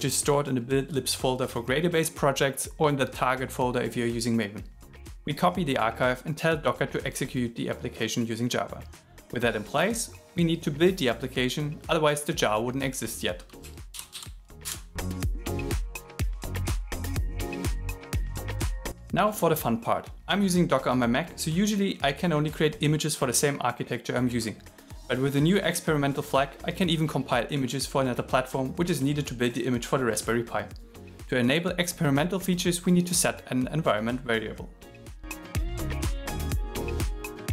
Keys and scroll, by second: 14.0 shift+8, 15.2 shift+7, 35.7-37.5 typing.